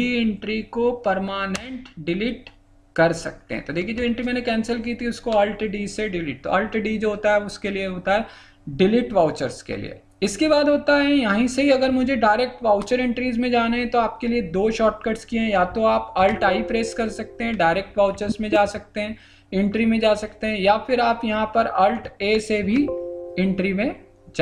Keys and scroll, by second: 16.2 alt+i, 22.6 alt+a.